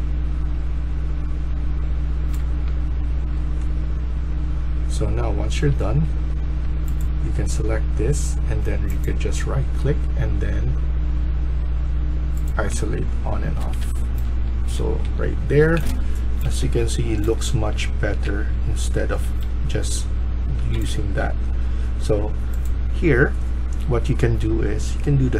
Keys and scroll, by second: 2.2-3.2 s, 6.0 Escape, 6.3 Escape, 13.5 Escape, 13.8 Escape, 14.0-21.3 typing.